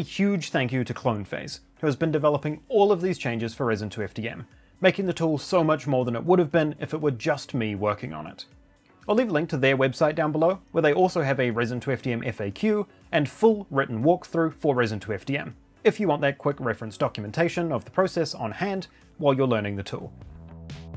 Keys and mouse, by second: 0.5 g, 0.6 middle click, 1.6 click, 2.0 shift+drag, 2.2 g, 2.3 middle click, 2.9-3.9 drag, 7.1 middle click, 7.7 click, 8.4 click, 19.0 click.